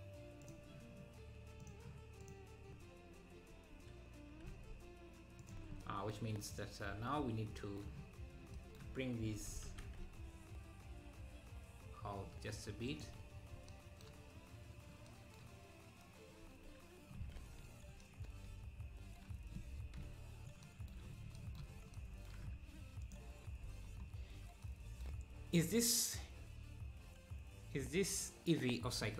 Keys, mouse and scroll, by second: 0.4-4.5 drag, 4.5 e, 6.5 click, 9.5 g, 16.4 Tab, 17.6 z, 20.0 KP_7, 21.2-21.9 scroll up 6, 23.1 click, 23.7 ctrl+s, 24.1-24.6 scroll up 3.